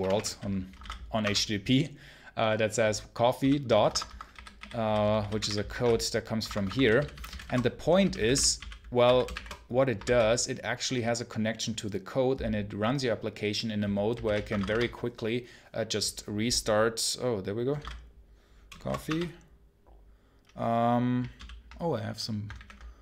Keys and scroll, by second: 1.1 Return, 6.7 j, 7.9 j, 14.6 Return, 18.9 Return.